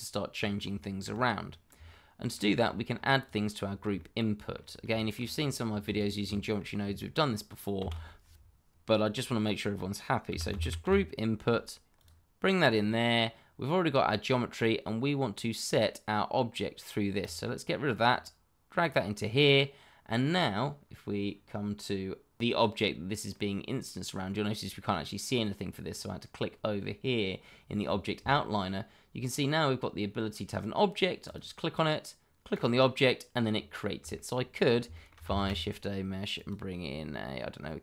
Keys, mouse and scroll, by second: 0.3-0.7 scroll down 1, 0.7 shift+middle click, 1.3-1.7 scroll down 1, 1.8 shift+middle click, 2.5-2.9 scroll up 1, 3.2 click, 3.6-3.9 scroll down 1, 3.9 shift+middle click, 5.0 middle click, 5.3-5.9 scroll up 1, 5.9 click, 6.3 shift+middle click, 6.3 middle click, 6.5 shift+middle click, 7.7 shift+a, 10.3 g, 10.5 r, 10.8 u, 11.9 click, 17.2 click, 22.4 click, 22.9-23.3 scroll down 1, 23.3 middle click, 31.2 click, 33.4 scroll up 1, 34.1 shift+middle click, 34.6 scroll down 1, 34.9 shift+middle click, 35.3 shift+a, 36.3 click.